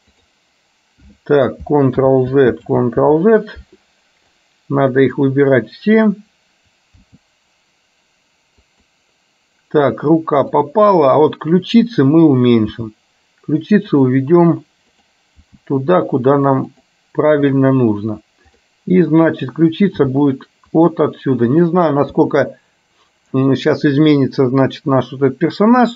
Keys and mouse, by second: 0.3 click, 2.1 ctrl+z, 2.7 ctrl+z, 4.5 click, 10.6 click, 12.7 g, 15.1 click, 15.6 g, 20.1 g, 21.6 click, 22.2 g.